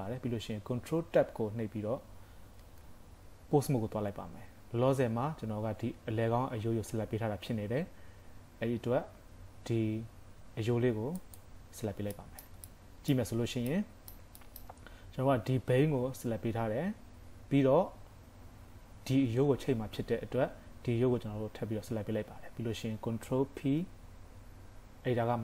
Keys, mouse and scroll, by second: 2.6 ctrl+Tab, 11.2 click, 12.1 shift+middle click, 12.6 scroll up 1, 12.7 middle click, 13.3-13.9 scroll up 4, 13.8 middle click, 14.4 shift+middle click, 23.5 ctrl+p.